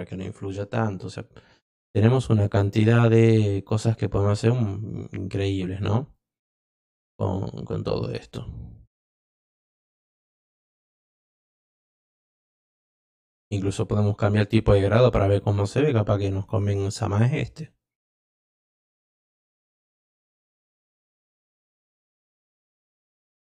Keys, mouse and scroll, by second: 0.8 click, 2.0 click, 4.0 drag, 6.1 click, 8.8-9.1 drag, 9.6-10.0 drag, 10.9-11.3 drag, 12.4-12.8 drag, 13.6 click, 18.4 click, 23.0 click.